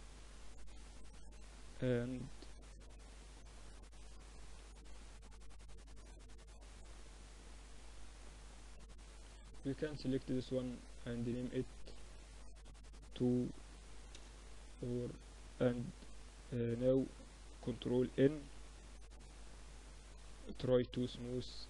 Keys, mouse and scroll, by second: 0.4 right click, 1.1 middle click, 3.6 Tab, 4.1-7.1 middle drag, 8.6-12.4 drag, 10.1 right click, 13.9-15.7 middle drag, 14.8 ctrl+2, 15.7 Tab, 16.6 a, 16.9 a, 17.3 ctrl+n, 17.5 Tab, 19.7 t, 20.2-21.6 drag, 20.5 t.